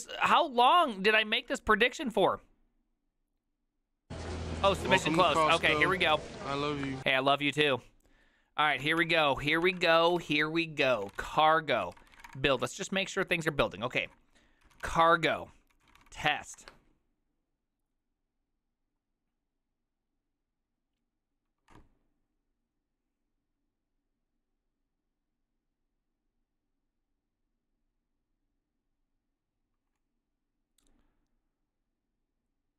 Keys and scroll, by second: 7.7 alt+{, 8.6-12.8 typing, 9.5 ctrl+a, 10.0 ctrl+c, 10.3 ctrl+c, 14.5-16.6 typing.